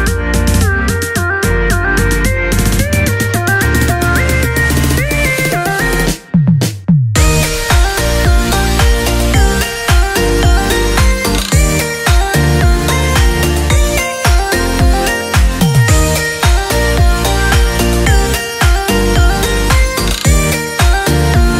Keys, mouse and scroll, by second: 7.6 click, 10.8 click, 14.8-18.0 drag.